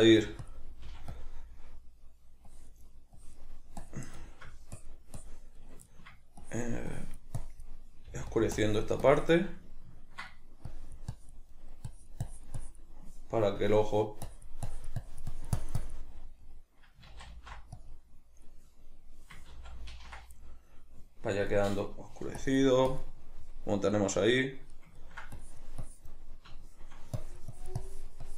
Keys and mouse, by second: 0.2 f, 4.8-5.6 drag, 5.6-6.4 middle drag, 6.4-9.6 drag, 9.6-10.7 middle drag, 10.7-11.5 drag, 11.5-11.9 middle drag, 11.9-16.4 drag, 16.4-17.8 middle drag, 17.1 ctrl+z, 17.8-20.4 drag, 19.5 ctrl+z, 20.4-21.4 middle drag, 21.4 click, 22.0-22.4 middle drag, 22.4-24.0 drag, 24.0-25.4 middle drag, 25.4-26.3 drag, 26.3 middle click, 27.2-28.3 drag.